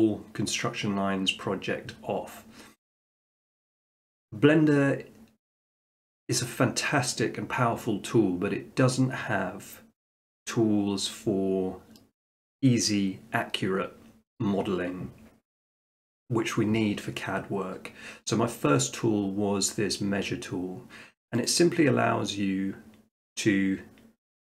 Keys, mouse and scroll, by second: 21.5 click.